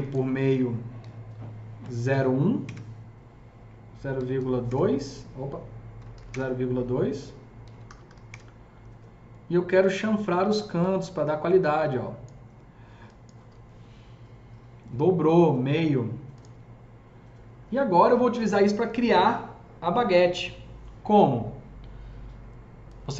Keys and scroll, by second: 0.0-0.8 typing, 0.0 Tab, 1.9 KP_0, 1.9 KP_1, 2.5 Return, 4.0 KP_Decimal, 4.2 KP_2, 4.5 Return, 5.8 KP_Decimal, 5.9 KP_0, 6.0 KP_2, 6.2 Return, 7.5 KP_Decimal, 7.6 KP_0, 7.7 KP_2, 7.9 KP_5, 8.1 Return.